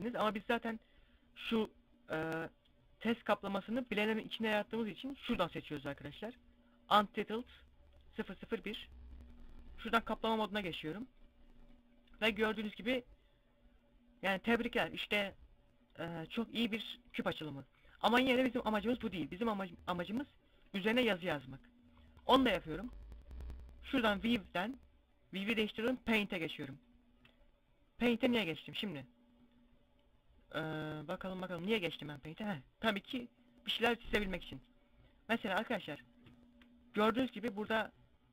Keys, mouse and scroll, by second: 4.7 click, 7.7 click, 8.7 click, 11.6 middle click, 15.7 middle click, 18.6 Tab, 21.1 scroll down 1, 22.1 scroll down 5, 24.0 click, 24.0 scroll down 5, 26.9-27.7 scroll up 3, 27.7 scroll down 1, 29.7-30.4 scroll down 2, 33.7 click, 37.4 ctrl+z.